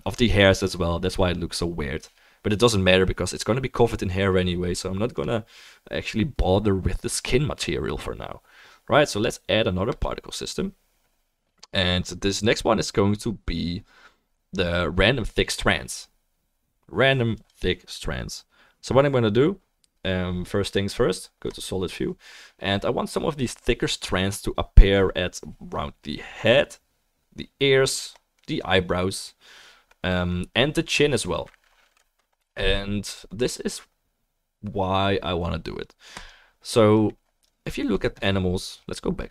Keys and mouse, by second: 5.1 click, 5.2-9.9 right drag, 9.9-17.5 drag, 17.5-21.5 right drag, 21.5 click, 21.6-39.3 right drag, 23.3-39.3 middle drag, 33.4-39.3 drag.